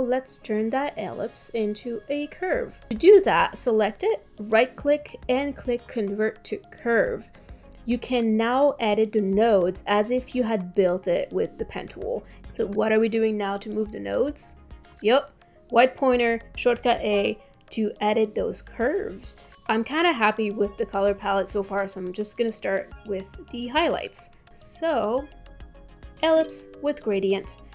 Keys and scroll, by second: 17.2 a.